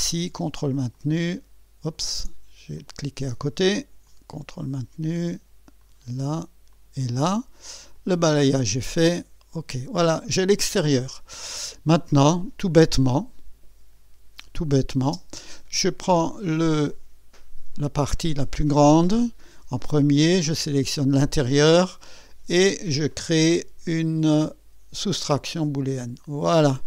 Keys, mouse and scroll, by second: 1.0 ctrl+click, 2.8 click, 4.1 ctrl+click, 5.8 ctrl+click, 6.7 ctrl+click, 8.0 click, 9.2 click, 10.5-12.4 drag, 12.5 scroll up 1, 13.0 scroll down 1, 14.7 click, 15.1 space, 16.2 click, 20.7 ctrl+click, 25.6 click.